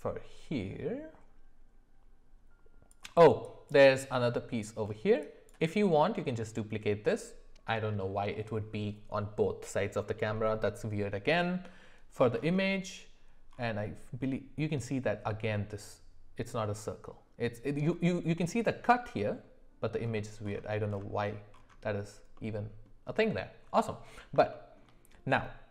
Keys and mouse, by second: 24.5 shift+middle click.